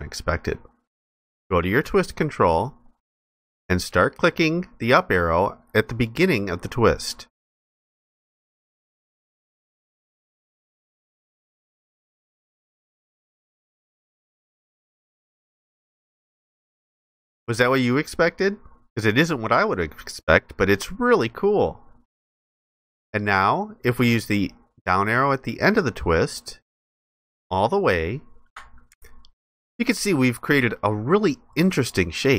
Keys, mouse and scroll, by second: 29.1 ctrl+alt+click.